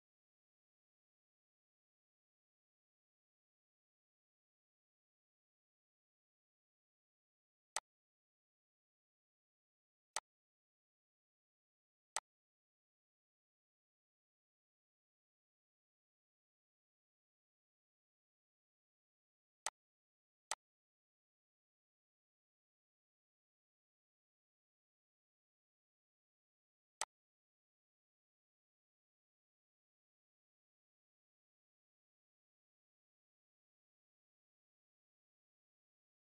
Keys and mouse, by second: 0.4 click, 1.6 click, 2.8 click, 4.8 click, 6.3 click, 7.2 click, 9.2 click, 9.9 click, 11.3 click, 12.8 click, 14.4 click, 16.7 click, 18.2 click, 20.2 click, 22.4 click, 23.9 click, 25.0 click, 26.2 click, 29.0 click, 31.0 click, 33.2 click, 35.4 click.